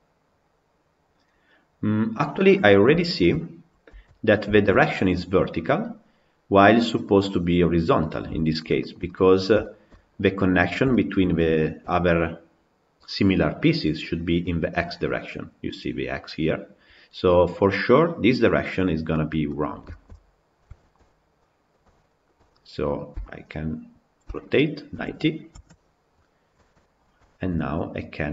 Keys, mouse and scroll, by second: 1.1 scroll down 2, 2.2-2.8 scroll down 6, 2.8-3.2 shift+middle drag, 3.2-3.9 scroll up 3, 3.9 Tab, 4.4-8.3 shift+middle drag, 8.3 scroll down 7, 8.6 scroll up 1, 8.9 middle click, 9.7-10.1 scroll down 1, 10.1-10.7 scroll up 4, 10.7 shift+middle click, 11.1 scroll up 1, 11.4-15.9 shift+middle drag, 18.8 scroll down 5, 19.3 middle click, 20.1-21.2 scroll up 7, 20.6 shift+middle click, 21.2-23.0 middle drag, 23.0 a, 24.2 r, 26.6 Tab, 26.8-27.1 scroll down 7, 27.1-28.0 shift+scroll up 4, 27.2 shift+middle drag, 28.0 click.